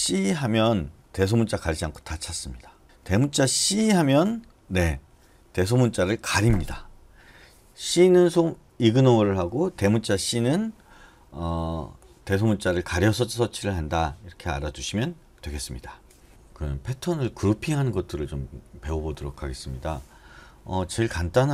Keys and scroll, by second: 2.8 BackSpace, 3.6 c.